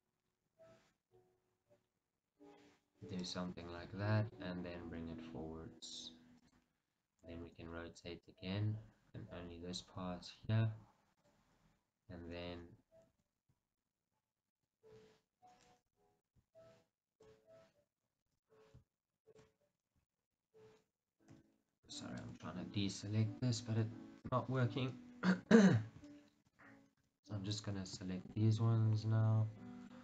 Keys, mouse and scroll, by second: 3.9 g, 6.7 click, 7.6 r, 11.4 click, 12.1-13.2 scroll up 1, 13.2 shift+z, 14.0-20.3 ctrl+right drag, 16.0 b, 20.0-20.3 scroll up 2, 20.3-24.4 shift+middle drag, 20.6-21.4 scroll up 2, 21.4 b, 24.4 click, 25.1-26.3 ctrl+right drag, 27.2 b, 28.5 shift+z, 29.1 scroll down 2, 29.3-30.0 middle drag.